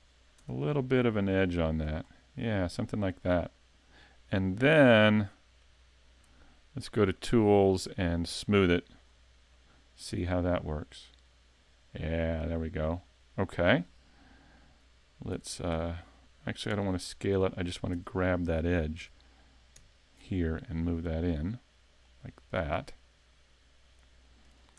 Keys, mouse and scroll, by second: 0.4 Tab, 0.6 scroll down 5, 1.1 middle click, 2.0-2.4 scroll up 3, 2.6 middle click, 5.6 click, 7.2 click, 8.5 click, 9.1 scroll down 3, 9.6 middle click, 13.2 scroll up 4, 13.6 middle click, 15.3 s, 17.2 middle click, 18.0 Tab, 19.0 a, 19.9 alt+right click, 20.3 middle click, 21.5 click, 24.2 middle click.